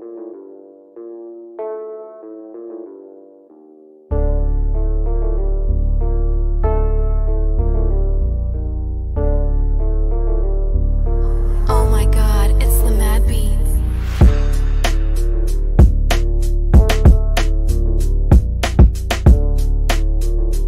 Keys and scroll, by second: 1.0 shift+Page_Up, 1.5 shift+F2, 11.5 F3, 13.2 shift+F2, 13.8 Escape, 17.4 F3, 17.9 F4, 18.4 Escape.